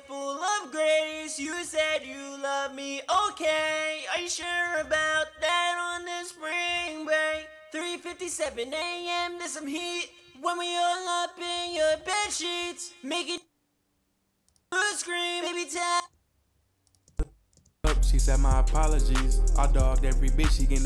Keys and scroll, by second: 1.5-3.9 typing, 4.4 ctrl+super+w, 19.7 ctrl+super+w.